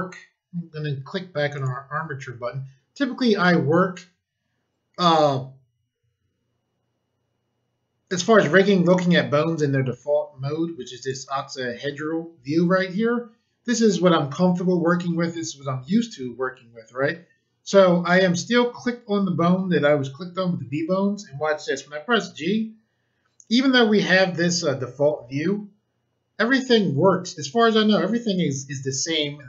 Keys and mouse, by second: 1.5 click, 11.0 click, 21.8 g.